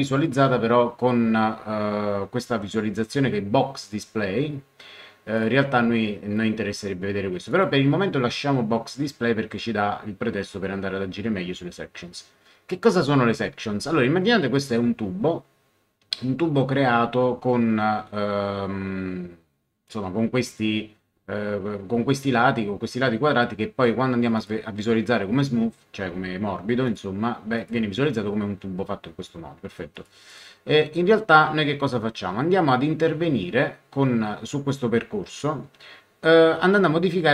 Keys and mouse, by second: 5.3 click, 7.5 click, 24.3 click, 26.8 click, 29.9 click.